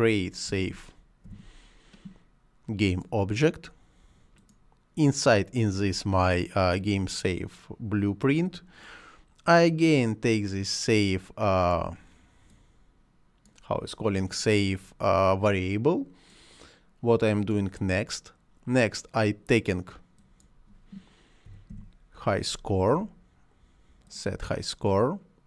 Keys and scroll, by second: 0.3-1.7 typing, 21.1-22.0 typing.